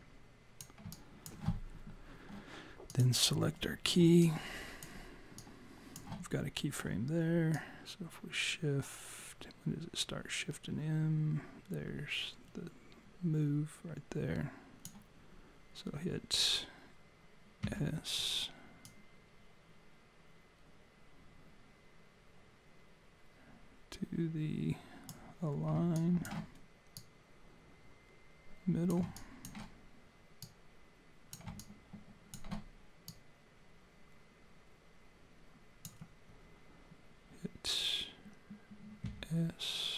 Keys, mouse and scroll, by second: 0.9 alt+click, 2.9 click, 4.2 alt+click, 5.4 click, 7.6 click, 17.6 s, 18.9 click, 26.0 alt+click, 27.0 click, 29.2 alt+click, 30.4 click, 31.6 alt+click, 33.1 click, 39.0 s.